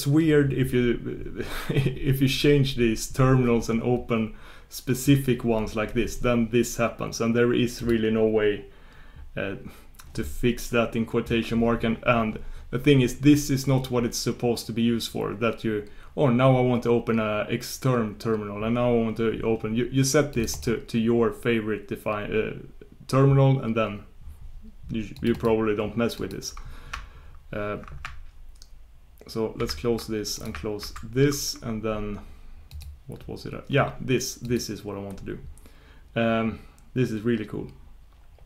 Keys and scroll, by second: 29.6 shift+super+q, 30.8 shift+super+q.